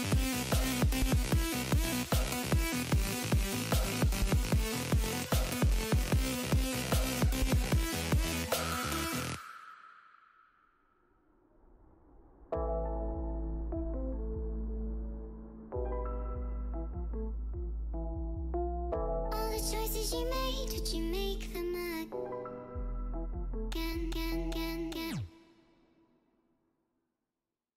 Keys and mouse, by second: 7.7 click, 13.4 click, 14.4 click, 15.3 x, 15.4 click, 16.7 click, 17.2 space, 17.6 click, 18.2 click, 18.4 click, 19.1 click, 19.8 click, 21.2 click, 22.1 click, 23.0 click, 23.4 click, 23.8 click, 24.6 space, 24.7 click, 25.0 click, 25.1 space, 25.2 click, 25.4 click, 25.9 x, 26.0 click, 26.6 click, 27.0 click, 27.5 space.